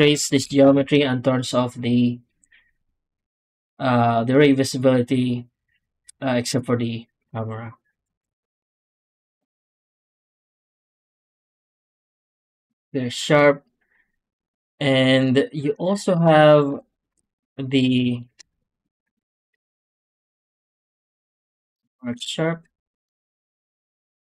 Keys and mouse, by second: 0.0 click, 0.5 ctrl+space, 7.8 ctrl+space, 9.2 x, 9.9 click, 10.2 Tab, 11.5 ctrl+e, 16.0 alt+a, 16.6 2, 16.8 click, 17.5 ctrl+click, 18.1 shift+click, 18.7 ctrl+click, 19.2 shift+click, 19.8 ctrl+click, 20.3 ctrl+e, 21.5 3, 21.8 click, 23.0 Tab, 23.2 w.